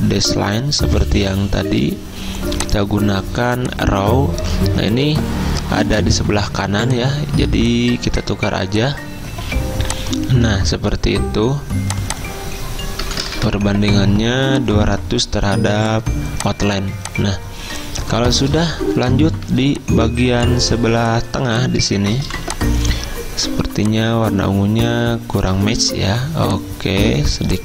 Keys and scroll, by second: 12.8-13.9 typing, 19.5 z, 22.3 v, 25.7 z.